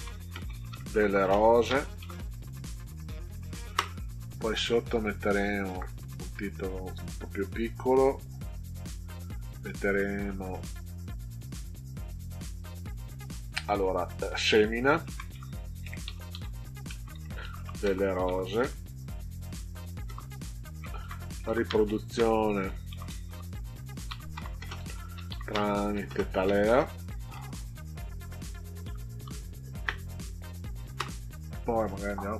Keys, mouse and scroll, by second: 0.0-2.5 typing, 5.8 Caps_Lock, 15.0-19.1 typing, 20.0 Return, 20.7-27.6 typing, 28.6 Left, 29.2 Delete, 29.6 Right, 29.8 Right.